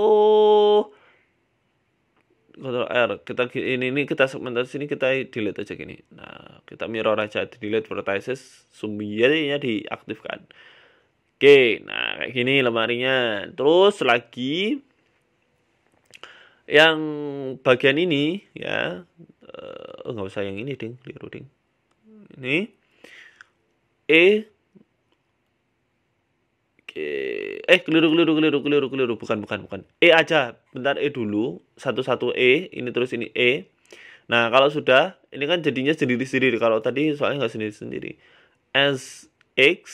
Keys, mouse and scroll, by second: 0.7 ctrl+r, 2.4 shift+middle click, 3.1 ctrl+r, 4.1 middle click, 4.3-5.0 scroll down 3, 5.0 click, 5.5 click, 7.0 Delete, 8.2 click, 8.5 Tab, 8.7 middle click, 9.1-9.5 scroll up 2, 9.5 shift+middle click, 10.0 g, 11.3 middle click, 11.6 scroll down 3, 11.7 middle click, 12.4 KP_1, 13.4-13.8 scroll up 2, 14.5 shift+middle click, 14.8 Tab, 15.0 scroll down 1, 15.0 scroll down 1, 15.2 shift+middle click, 15.4-15.8 scroll up 11, 15.8 shift+middle click, 17.1 click, 17.2 scroll down 1, 17.3 scroll down 2, 18.8 right click, 19.0 scroll down 2, 19.2 shift+middle click, 19.8 middle click, 20.7 right click, 21.4 shift+middle click, 22.5 shift+right click, 23.0 KP_1, 23.4 scroll down 1, 24.5-24.8 scroll down 2, 24.8 click, 25.5 e, 25.9 s, 28.1 ctrl+z, 30.9 ctrl+z, 31.5 right click, 32.6 e, 33.2 right click, 33.6 e, 34.4 right click, 35.2 middle click, 35.9 shift+right click, 36.5 KP_1, 37.7 s.